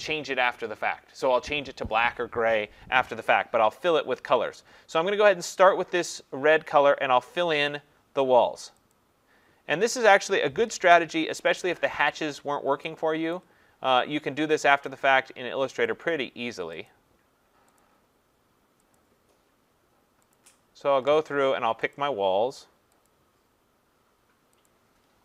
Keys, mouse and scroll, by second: 7.4 click, 8.9 click, 10.9 ctrl+=, 11.3 ctrl+=, 13.3-14.0 scroll, 13.3 click, 14.9 click, 15.9 click, 16.9 click, 17.8 click, 18.9 click, 20.3 click, 22.0 click.